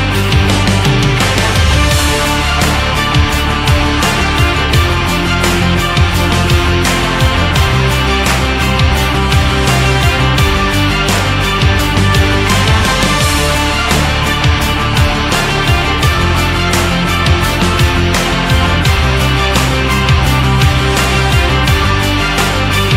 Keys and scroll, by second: 6.3 Up, 9.0 ctrl+z, 18.4 shift+Down, 20.9 shift+Up, 22.0 Down.